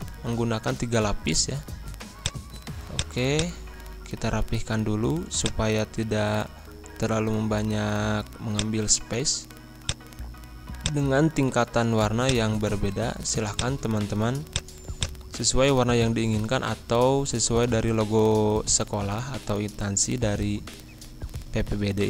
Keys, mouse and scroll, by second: 2.2 click, 4.0 ctrl+z, 5.3 click, 8.5-18.2 drag, 18.2 scroll up 1, 19.8 Right.